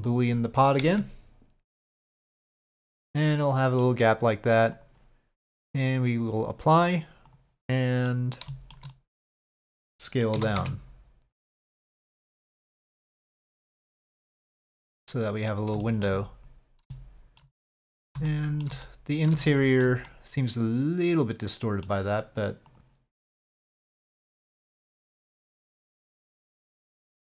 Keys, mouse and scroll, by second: 0.1 click, 0.9 Tab, 2.5-3.8 middle drag, 4.7 click, 5.8-6.4 drag, 7.3 click, 7.7-8.1 middle drag, 8.5 shift+middle click, 8.9 middle click, 10.0 middle click, 10.3 s, 14.1-15.6 middle drag, 15.8 shift+middle drag, 16.9-17.4 shift+middle drag, 17.6-18.1 middle drag, 18.3 shift+middle drag, 18.9-19.3 middle drag, 19.5-19.8 shift+middle drag, 20.0-21.9 middle drag, 22.7 click, 23.8-25.6 drag, 25.9-27.2 middle drag.